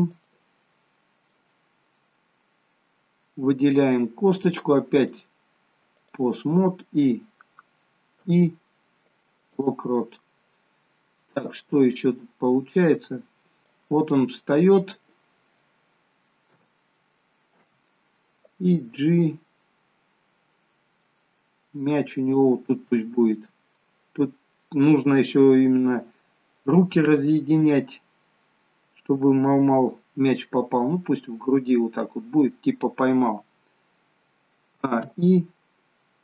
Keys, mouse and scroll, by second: 0.2 click, 1.2 click, 2.4-3.5 scroll up 2, 3.8 click, 3.8-4.2 scroll up 2, 5.1 click, 8.3 i, 11.9 click, 14.6 middle click, 16.7 shift+middle click, 19.0 g, 25.5-26.4 scroll up 2, 26.0 middle click, 27.1 middle click, 31.0 middle click, 34.9 a.